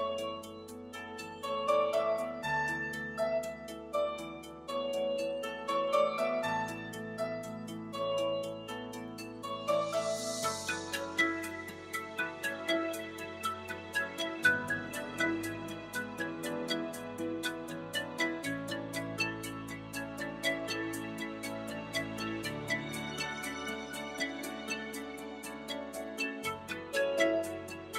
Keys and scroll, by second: 7.5 alt+shift+super+z.